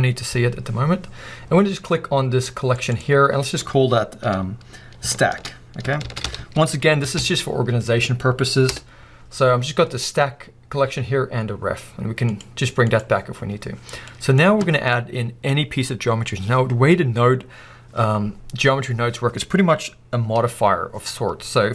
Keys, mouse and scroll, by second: 2.9-12.4 drag, 12.9 click, 14.1-21.7 middle drag.